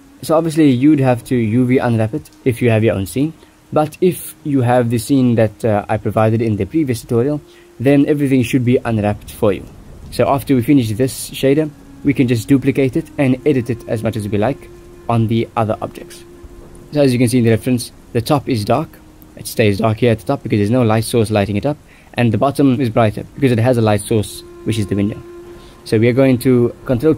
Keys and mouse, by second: 0.0 click, 3.6 shift+middle click, 3.7 shift+click, 5.3 shift+drag, 6.3 ctrl+s, 10.1 shift+middle drag, 11.9 shift+middle click, 13.0 ctrl+s, 13.2 click, 13.2 middle click, 16.9 click, 16.9 middle click, 19.9 shift+middle click, 24.2 middle click, 24.8 ctrl+s, 25.3 ctrl+t.